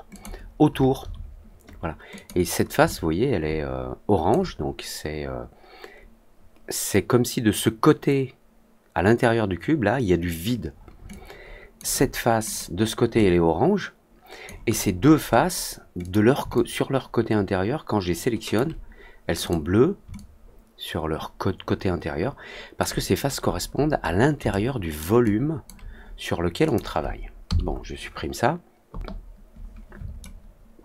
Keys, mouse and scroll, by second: 0.0 click, 2.1 click, 2.8-4.2 alt+drag, 11.0 alt+click, 12.4 click, 13.1-14.4 alt+drag, 14.9 middle click, 15.2 middle drag, 15.9 click, 16.5-18.5 alt+drag, 19.4 click, 20.1-22.7 alt+drag, 23.1-23.6 scroll down 2, 23.8 scroll up 1, 24.0 scroll down 1, 24.1 middle click, 24.4-24.9 alt+middle drag, 25.2 alt+click, 26.6 click, 30.1-30.8 alt+middle drag.